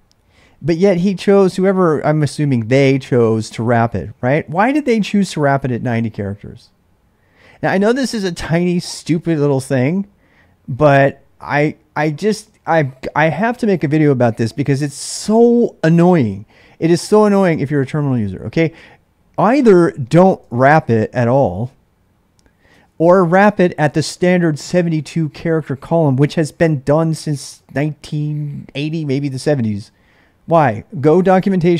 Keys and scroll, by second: 3.3 j, 4.0 k, 20.5 shift+j, 22.7 ctrl+[, 22.9 u.